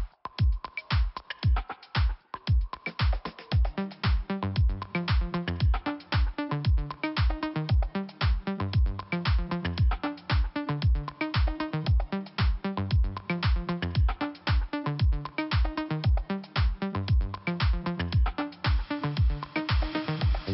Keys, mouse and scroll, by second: 0.0 click, 0.0 click, 1.1 click, 3.3 click, 6.4 click, 7.7 click, 9.1 click, 10.6 click, 11.5 click, 11.7 click, 12.2 scroll down 1, 13.3 click, 18.4 scroll up 1, 19.9 click, 20.0 click.